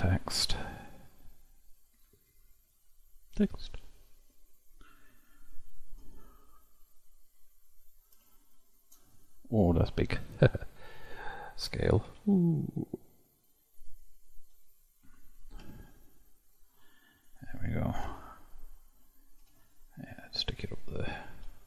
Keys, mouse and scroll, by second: 6.0 KP_1, 7.0-8.2 scroll down 18, 8.2 scroll down 1, 8.4-9.1 shift+middle drag, 9.1-9.8 scroll up 7, 9.8-10.2 scroll down 9, 10.2-12.1 middle drag, 12.1 s, 14.4 KP_Decimal, 15.7 s, 18.1 KP_1, 19.4 g, 21.4 KP_Decimal.